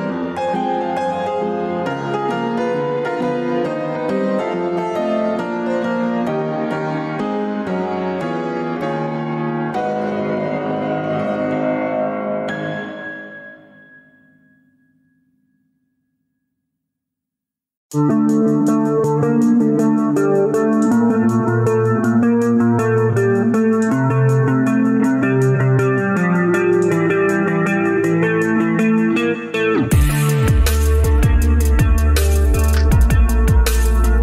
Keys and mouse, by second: 0.5-1.8 drag, 2.7 right click, 3.5 click, 6.0-6.7 drag, 20.0 click, 25.8-27.0 middle drag, 27.9 middle click, 28.7 Tab, 29.7 alt+z, 30.1-30.9 middle drag.